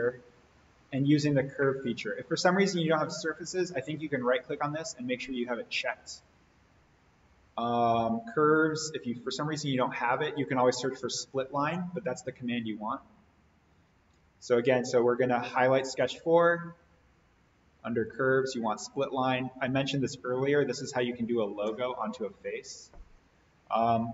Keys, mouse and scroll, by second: 3.0 right click, 7.6 click, 14.5 click, 18.3 click.